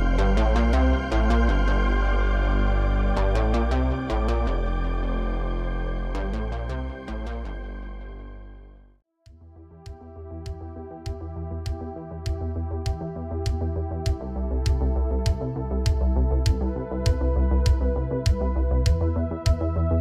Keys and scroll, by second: 1.1 i, 6.3 ctrl+c, 7.6 ctrl+c, 7.9 ctrl+c, 8.1 ctrl+c, 8.4 ctrl+c, 10.3 ctrl+shift+v, 13.0 shift+d, 16.0 space.